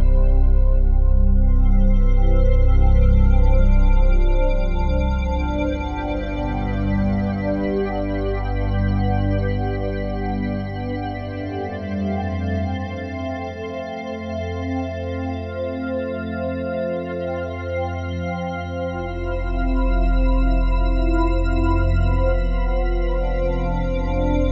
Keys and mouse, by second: 2.4 click, 3.1 click, 4.0 e, 4.9 click, 5.2 e, 5.9 click, 6.8 click, 7.3-9.1 alt+drag, 9.5-11.2 alt+drag, 11.2 typing, 11.5 ctrl+alt+click, 12.6 click, 12.8 click, 13.7 click, 14.1 shift+click, 18.1 Up, 18.4 Return, 19.5 click, 20.4 alt+click, 21.6 alt+click, 22.6 Tab.